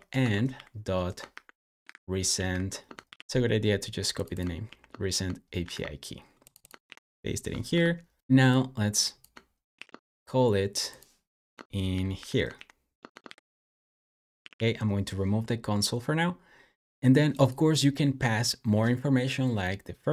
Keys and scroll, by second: 0.0-3.5 typing, 4.5 super+c, 5.5 super+w, 6.7 super+v, 7.5 Escape, 7.7-8.7 typing, 9.6 super+x, 11.4 Escape, 11.7 k, 12.0 o, 12.4 super+v, 13.0 Escape, 13.1 j, 14.3 d, 14.4 d, 18.3 typing.